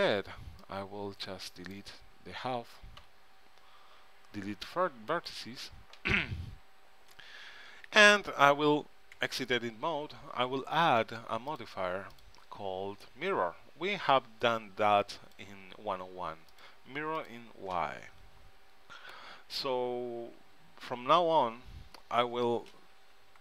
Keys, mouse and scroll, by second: 3.1 x, 8.0 ctrl+Up, 9.3 Tab, 11.6-14.0 drag, 16.6-19.0 drag, 20.5 n, 21.0 n, 23.3 ctrl+Up.